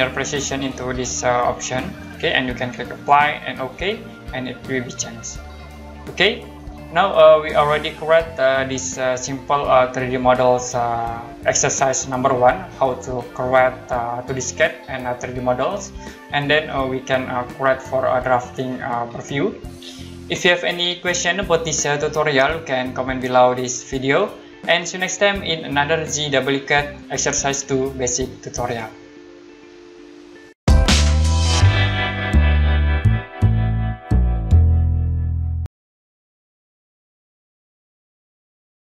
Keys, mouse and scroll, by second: 1.5 click, 5.4 scroll down 1, 6.2 middle click, 6.8-7.6 scroll up 1, 7.6 middle click.